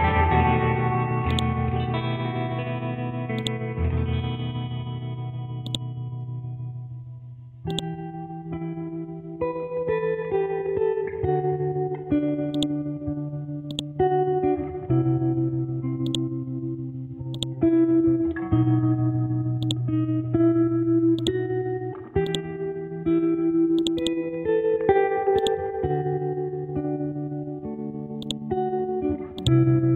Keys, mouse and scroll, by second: 0.2-1.3 scroll up 1, 1.3 click, 1.7 Up, 2.8 scroll down 1, 3.4 click, 4.8 scroll up 1, 5.7 ctrl+click, 6.8 scroll down 1, 7.7 click, 8.0-9.1 scroll down 1, 9.4-10.6 scroll up 1, 14.0-16.1 drag, 17.8-18.8 scroll down 1, 18.8 scroll up 1, 19.6 click, 20.0 ctrl+v, 21.2 click, 26.8 shift+Tab, 28.2 click.